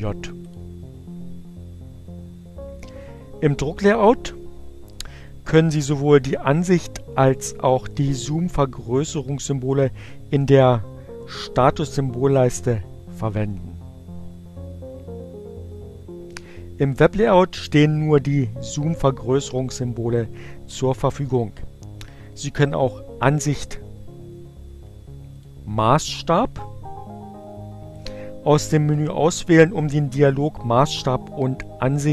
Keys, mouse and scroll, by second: 0.0 click, 25.0 click, 26.4 click.